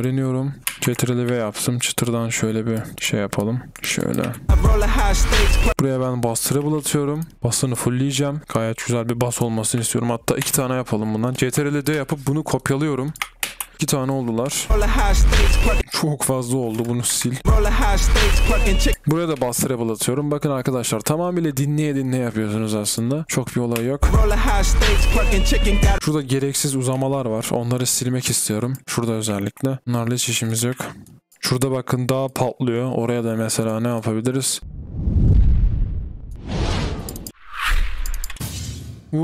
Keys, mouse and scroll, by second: 17.6 typing, 19.0 ctrl+b, 19.3 typing, 23.7 typing, 26.0-27.7 typing, 29.2-30.0 typing, 30.4 double click, 30.7 Delete, 31.4 typing, 33.8 double click, 34.6 space, 37.1 double click, 37.3 space, 38.1 double click, 38.2 space.